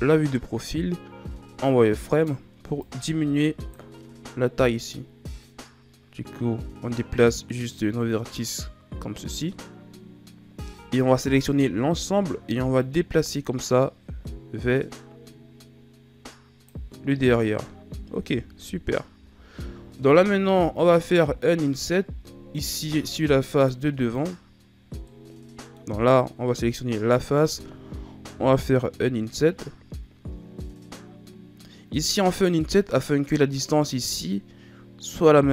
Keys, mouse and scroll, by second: 1.1 z, 2.1 right click, 2.6 b, 4.8 click, 10.5 a, 11.4 a, 12.7 click, 18.5 KP_1, 19.1 z, 20.7-22.6 middle drag, 22.6 ctrl+Tab, 24.1 right click, 25.0-28.2 middle drag, 32.8 middle click, 33.7-35.5 scroll up 1.